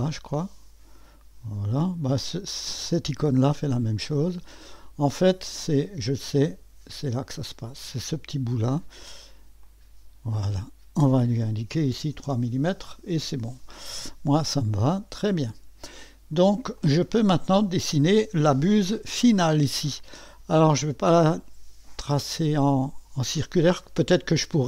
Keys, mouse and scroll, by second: 0.0 click, 1.7 click, 2.9 click, 4.7 click, 7.5 click, 7.8 click, 9.6 click, 12.0 3, 12.2 Return, 14.4-15.5 drag, 16.8-18.1 drag, 19.9-21.8 drag.